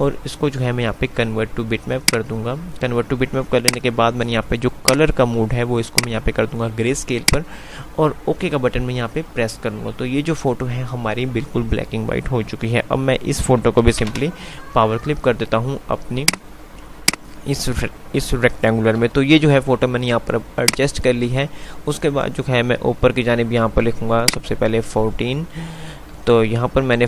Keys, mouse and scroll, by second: 2.2 click, 13.8-14.5 typing, 13.9 click, 16.4 click, 19.2 F3, 20.7 click, 24.4-27.0 drag.